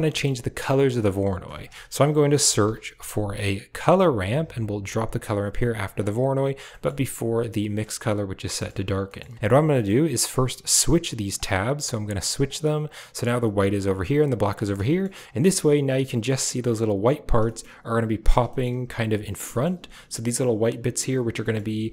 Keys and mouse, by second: 0.5 click, 0.8 middle click, 1.5 shift+a, 5.6 drag, 6.6 middle click, 9.6 middle drag, 10.2-10.8 drag, 11.2-12.1 drag, 12.3 drag, 12.8-13.4 drag, 13.8-14.4 drag, 14.8 shift+middle click, 17.3 shift+middle click, 18.4 shift+middle click, 19.4 shift+click, 21.3 shift+click.